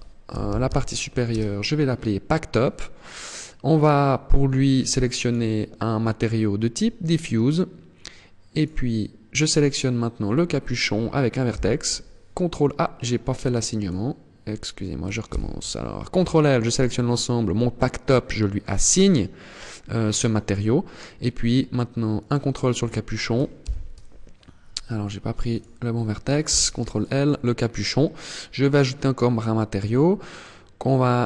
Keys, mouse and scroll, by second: 3.1 click, 8.0 right click, 11.0 ctrl+l, 13.2 right click, 14.7 ctrl+l, 18.2 click, 21.6 right click, 23.0 ctrl+l, 25.0 right click, 25.9 ctrl+l, 28.1 click.